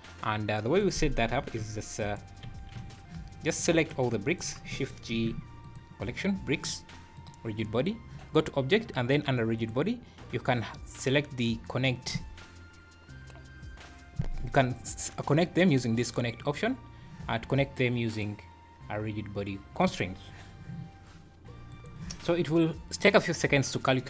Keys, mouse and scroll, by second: 0.8 click, 1.2 scroll down 2, 1.6 g, 2.0 scroll down 1, 2.7 h, 3.6 click, 4.3 click, 5.1 shift+g, 7.1 click.